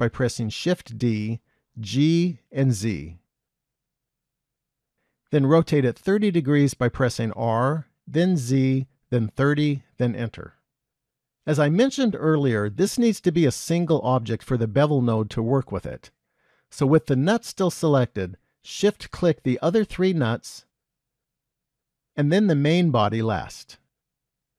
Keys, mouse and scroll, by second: 1.0 shift+d, 7.3 r, 12.8-13.4 scroll down 2, 13.7-14.3 scroll down 1, 14.3-15.7 scroll down 1, 16.0 shift+middle click, 19.8 shift+click, 21.0 shift+click, 22.4 shift+click, 23.6 shift+click.